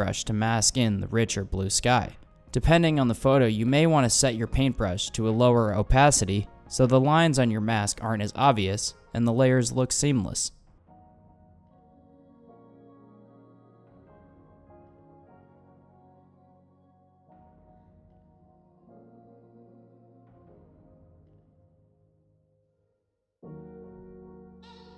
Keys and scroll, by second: 15.3 super+z.